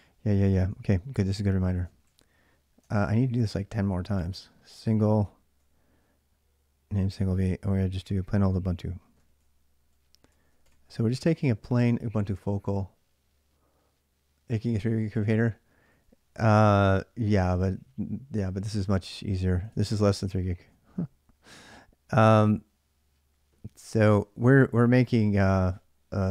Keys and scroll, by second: 0.5 ctrl+a, 0.7 ctrl+a, 1.8 ctrl+a, 2.7 ctrl+[, 2.8 k, 3.2 k, 4.0-4.5 l, 5.0-5.3 l, 6.7-11.0 typing, 11.6 Return, 15.4-16.4 typing, 19.2-20.7 typing, 23.6 ctrl+a, 24.1 ctrl+a.